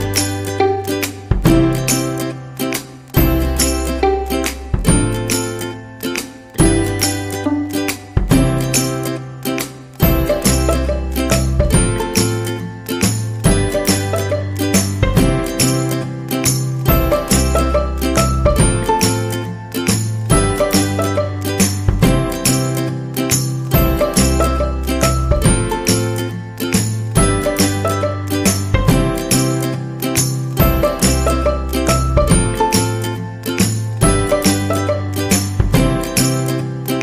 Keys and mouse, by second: 0.3 alt+z, 0.8 e, 1.8 alt+z, 2.2 s, 5.2 e, 6.4 alt+z, 6.9 s, 8.0 g, 10.4 shift+middle click, 12.1 middle click, 12.9-15.5 middle drag, 15.9 middle click, 16.3 KP_1, 18.7 shift+middle click, 19.1 middle click, 21.1 middle click, 22.3 shift+right click, 22.8 shift+right click, 24.5 KP_1, 25.1 g, 26.3 middle click, 27.2 right click, 27.6 shift+right click, 28.0 shift+right click, 28.3 KP_1, 30.0 KP_3, 30.7 shift+middle click, 31.4 alt+z, 31.9 shift+middle click, 32.8 right click, 33.4 c, 35.2 shift+middle click, 35.7 g.